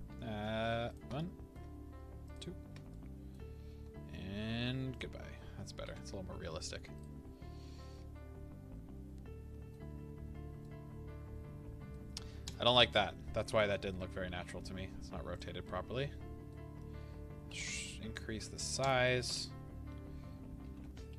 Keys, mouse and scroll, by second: 0.9 shift+click, 1.1-2.3 middle drag, 2.3 shift+click, 2.9-4.9 middle drag, 3.7 s, 5.1 middle click, 5.9 alt+a, 6.9 click, 7.3-7.9 scroll down 2, 7.9-12.5 middle drag, 9.9-10.3 scroll up 2, 10.3-10.6 scroll down 2, 12.5 click, 13.5 KP_7, 14.5 r, 15.3 click, 15.6-18.8 middle drag, 16.7-17.5 scroll, 17.5 s, 18.8 click, 20.6 g.